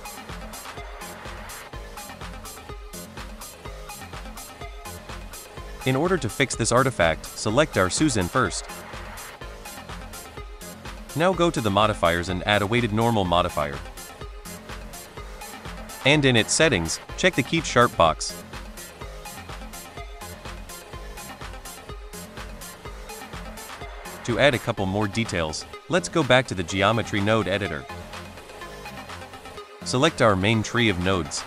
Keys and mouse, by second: 2.0 click, 3.2 shift+middle drag, 4.4 shift+middle drag, 8.5 click, 10.8 click, 11.6-14.6 drag, 24.4 shift+middle drag, 25.6 shift+middle click, 29.9 click.